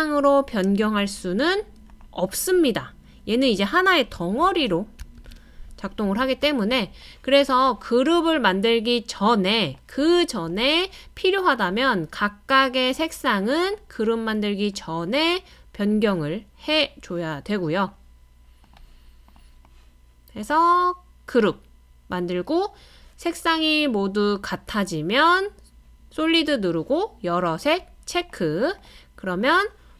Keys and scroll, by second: 4.4 super+z, 5.2 super+z, 6.2 super+z.